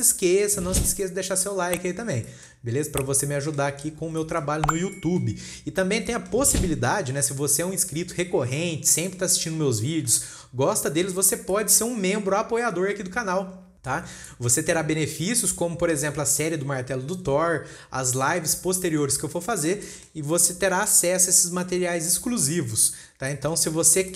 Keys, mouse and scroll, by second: 0.0-0.3 scroll up 4, 1.3-1.8 shift+middle drag, 1.8 scroll up 1, 1.8-2.3 scroll down 6, 2.3-2.7 scroll up 3, 2.8-3.2 shift+middle drag, 3.2-3.5 scroll up 1, 3.5-4.3 shift+middle drag, 4.3-4.6 scroll down 3, 4.7-5.7 shift+middle drag, 5.7-6.1 scroll up 1, 6.1 scroll down 2, 6.5 shift+middle click, 7.0-7.3 scroll up 3, 7.7 scroll down 1, 8.2 scroll up 3, 9.1 scroll down 4, 9.6-13.1 shift+middle drag, 13.1 scroll up 3, 14.3 scroll down 3, 14.7-15.5 shift+middle drag, 15.5 scroll up 3, 16.6 scroll down 3, 19.3-23.4 shift+middle drag, 23.4 scroll up 2, 23.7-24.1 shift+middle drag.